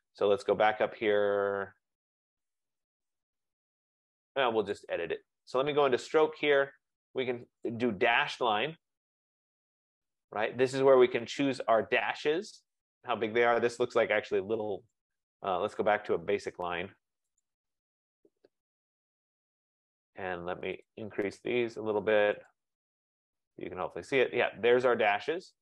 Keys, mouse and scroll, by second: 0.3-0.9 scroll, 0.9-1.4 scroll up 12, 1.6-3.1 scroll down 13, 3.9 scroll up 2, 4.9 click, 5.1-5.7 scroll, 5.7 click, 7.8 click, 16.1 click, 17.4 click, 20.9 click, 21.5 click, 22.6 click, 23.0 click, 23.7 click.